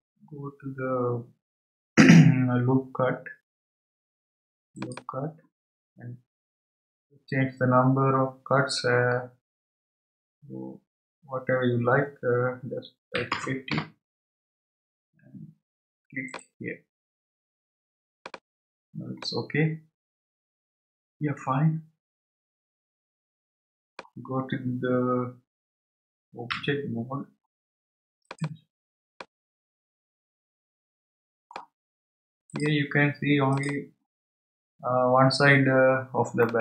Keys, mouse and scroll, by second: 4.7-7.9 drag, 10.0-13.1 drag, 16.3-19.2 drag, 19.2-22.2 middle drag, 28.2 click, 29.2-32.2 middle drag, 35.6 click, 36.4-36.6 middle drag.